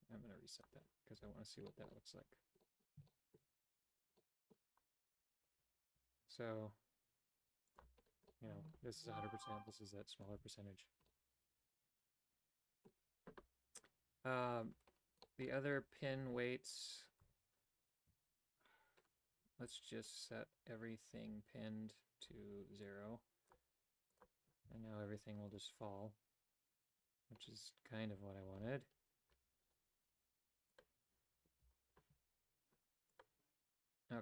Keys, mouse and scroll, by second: 0.6 click, 0.9-1.6 typing, 1.7 shift+middle click, 2.6 middle click, 3.1 shift+middle click, 4.2 middle click, 5.4 alt+right click, 6.0 g, 8.3 middle click, 9.7 middle click, 10.3 a, 11.1-12.9 middle drag, 14.8 Tab, 15.2 middle click, 16.2 x, 17.2 Tab, 18.1 a, 22.9 click, 24.1 click, 24.7 a, 30.7 click, 31.8 alt+right click, 33.1 click.